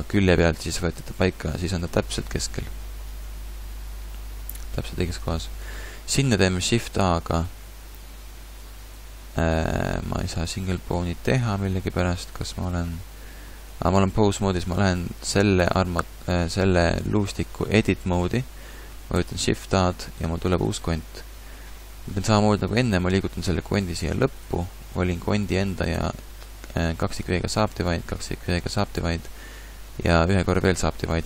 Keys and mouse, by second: 1.6 click, 2.5 KP_1, 5.2 KP_3, 6.8 shift+a, 14.4 Tab, 19.2 shift+a, 22.9 g, 25.9 w, 28.0 w, 30.0 w.